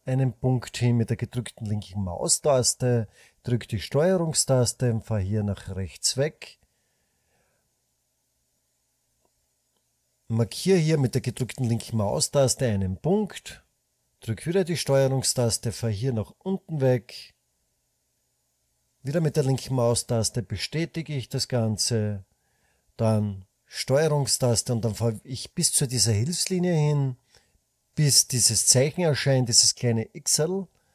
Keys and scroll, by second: 0.0-1.3 typing, 11.1-11.9 typing.